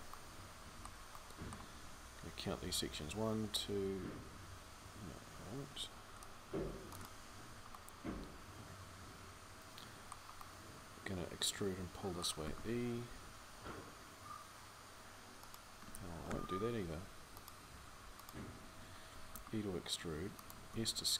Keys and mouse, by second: 5.5 c, 16.1 ctrl+z, 19.1 e, 20.6 s.